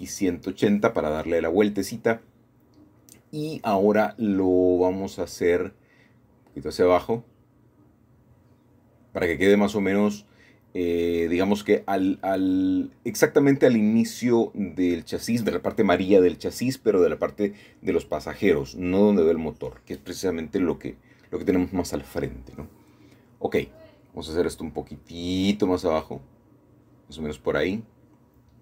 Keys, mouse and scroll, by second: 0.5-1.8 middle drag, 1.8-2.2 scroll up 1, 2.2-2.6 scroll down 1, 2.6-3.0 scroll up 1, 4.6 g, 5.2 z, 10.2 shift+middle click, 10.4 shift+click, 12.9-13.6 scroll down 2, 14.5 shift+middle click, 15.9 middle click, 16.1-17.5 middle drag, 17.9 2, 18.9-21.6 drag, 22.7 g, 23.2 z, 25.9 click, 27.5 ctrl+r.